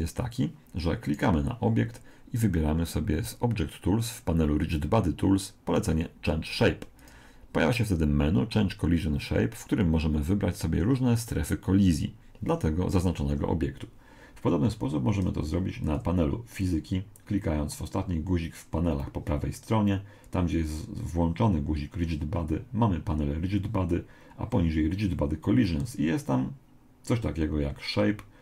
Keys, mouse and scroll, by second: 0.1 click, 1.1 right click, 7.0 click, 15.9 click.